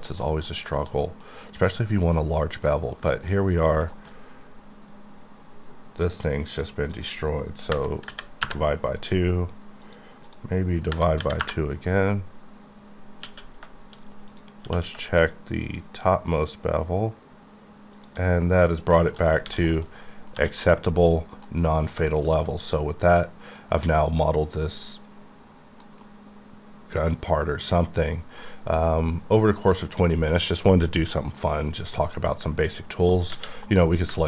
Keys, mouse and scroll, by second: 0.0 shift+middle click, 0.3 shift+double middle click, 0.5 shift+scroll down 1, 0.8 shift+middle click, 0.9 middle click, 1.4 scroll up 1, 2.4 scroll down 1, 2.7 middle click, 3.0 shift+middle click, 3.3 shift+scroll up 4, 3.9 shift+middle click, 4.1-5.0 scroll up 5, 7.0 click, 7.8 KP_Divide, 8.1 KP_2, 8.5 KP_Enter, 9.9 click, 10.3 click, 11.2 KP_2, 11.5 KP_Enter, 13.3 q, 14.3 click, 14.7 q, 15.1 shift+click, 18.0 shift+click, 18.5-19.4 scroll down 12, 19.0 shift+middle click, 19.5 alt+a, 19.7 middle click, 19.9-20.4 scroll up 1, 20.4 1, 20.7 middle click, 21.5 middle click, 22.2 shift+middle click, 22.9 middle click, 24.1-25.9 scroll down 1, 26.1-28.3 middle drag, 33.7 m.